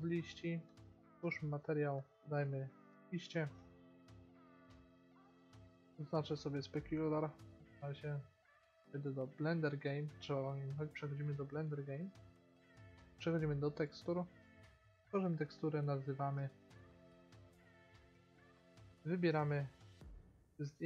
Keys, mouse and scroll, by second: 6.4-7.7 drag, 11.3 middle click, 12.8-16.5 drag, 20.8 click.